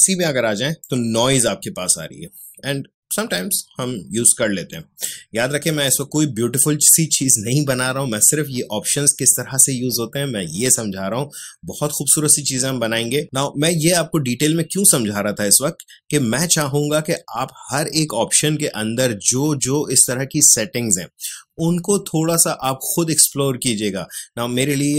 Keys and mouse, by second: 0.8-17.6 drag.